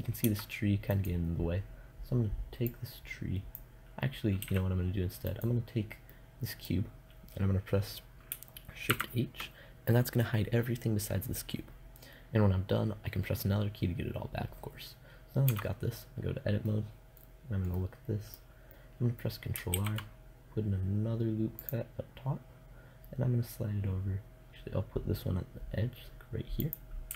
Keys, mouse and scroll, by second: 0.3 right click, 2.9 click, 3.8 a, 8.3 shift+h, 11.4 middle click, 14.9 Tab, 16.3 middle click, 19.2 ctrl+r, 21.0-22.4 scroll up 1, 26.2-27.1 drag, 26.9 ctrl+r.